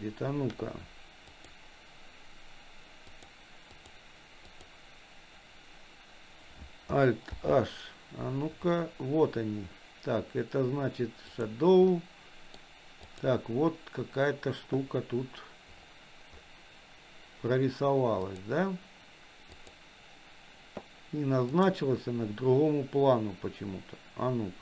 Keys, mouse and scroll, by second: 1.3 click, 3.1 click, 3.8 click, 4.5 click, 7.3 alt+h, 11.3 click, 11.9 middle click, 13.0 click, 18.3 click, 19.5 click, 21.5 click.